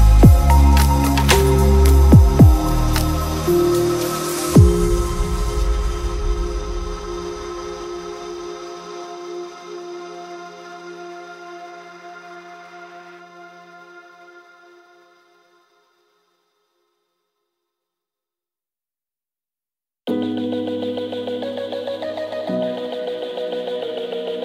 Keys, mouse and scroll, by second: 2.9 click, 3.6 middle click, 3.9 middle click, 4.4 click, 4.7 click, 5.4 click, 6.5 click, 6.8 click, 7.7 click, 8.7 click, 9.4 click, 9.6 middle click, 9.8 click, 10.8 click, 11.4 click, 14.7 click, 15.0 click, 15.5 shift+click, 15.7 middle click, 16.0 shift+click, 16.3 middle click, 16.7 middle click, 17.0 shift+click, 17.3 click, 17.7 shift+s, 18.0 click, 18.2 r, 20.8 click, 22.9 click.